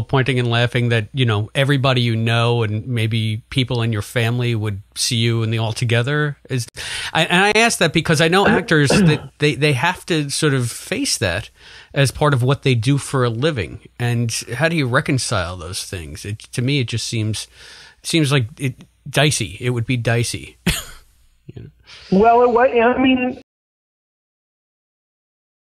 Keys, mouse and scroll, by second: 2.3 click, 3.3 click, 4.3-5.5 drag, 6.3 click, 7.4 ctrl+z, 8.1 click, 9.6 click, 10.7-12.7 drag, 13.0 click, 13.9 click, 15.0-18.0 drag, 18.9 click, 19.8 click, 21.8-23.0 drag, 23.3 space, 23.7 Delete, 24.6 click.